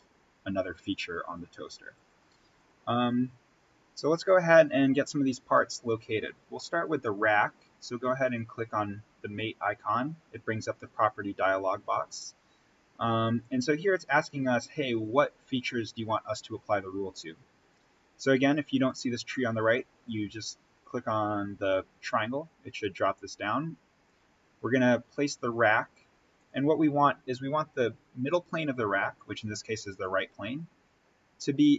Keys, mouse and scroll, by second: 1.9 right click, 2.5 click, 5.1-5.5 scroll up 1, 5.5-8.1 middle drag, 8.1 click, 11.3-17.6 drag, 22.0 click, 26.2 click, 29.9 click.